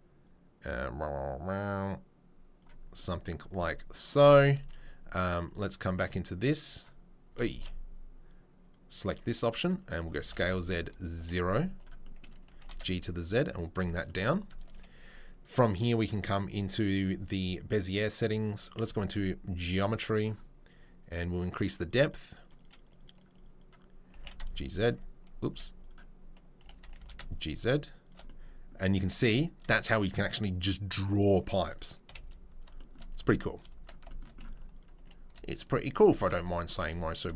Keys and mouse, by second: 7.5 ctrl+z, 9.6-15.8 middle drag, 10.2 s, 12.4 g, 14.7 a, 15.8 click, 16.0-18.7 middle drag, 18.7 click, 18.8 middle click, 18.8 right click, 19.1-28.1 drag, 19.1-34.7 middle drag, 19.1-25.9 right drag, 26.6 a, 26.8 g, 32.0 KP_7, 33.1 z, 34.7 click, 34.9-37.0 middle drag, 34.9 g, 36.1 r, 37.0 right click, 37.1 shift+middle click.